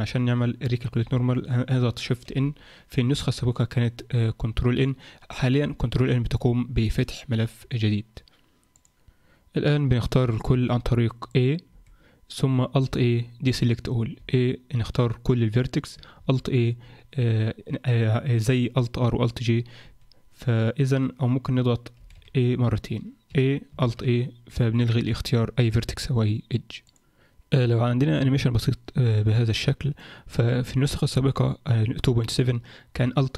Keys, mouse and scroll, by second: 0.0 Tab, 1.0 a, 2.3 shift+n, 8.9 alt+a, 11.3 click, 11.7 a, 12.9 alt+a, 14.1 a, 16.2 alt+a, 19.8 a, 22.0 a, 22.2 a, 23.3 a, 23.8 alt+a, 27.0 click, 29.3 click.